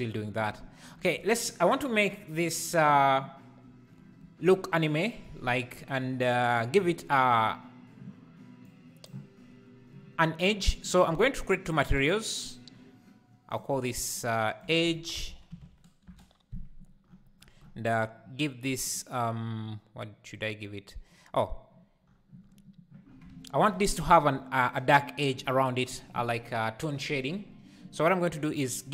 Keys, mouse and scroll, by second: 11.8 click, 13.6-18.2 drag, 18.2-18.9 scroll down 10.